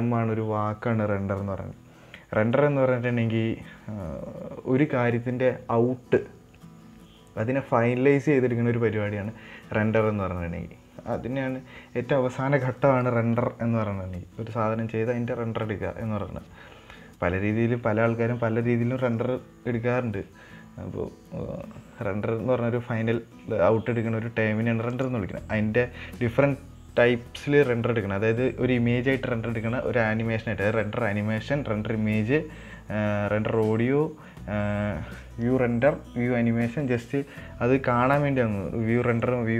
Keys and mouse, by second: 25.3-39.5 drag.